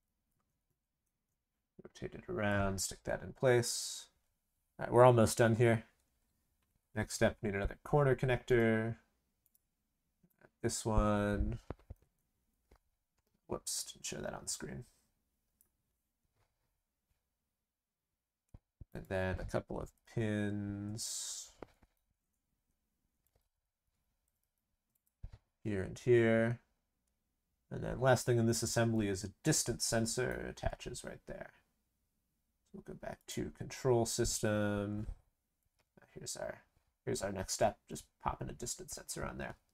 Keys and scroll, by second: 19.8 ctrl+c, 20.0 ctrl+v, 24.2 ctrl+c, 24.3 ctrl+v.